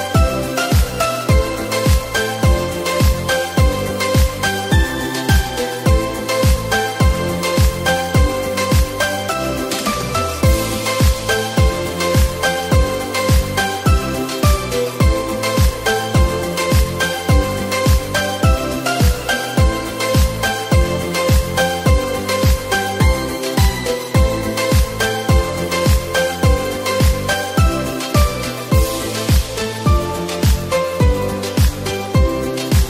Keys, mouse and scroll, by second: 5.3 click, 7.0-9.1 shift+middle drag, 9.1 click, 11.2-12.7 drag, 18.2 click, 19.7 scroll up 2, 20.3 scroll down 1, 21.4-24.5 shift+middle drag.